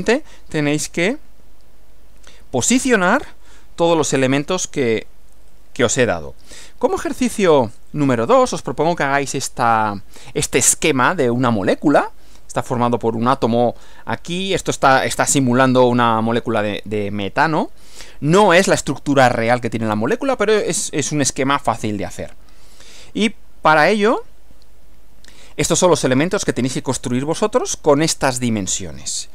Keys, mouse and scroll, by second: 6.4 Right, 7.4 Right, 23.6 Right.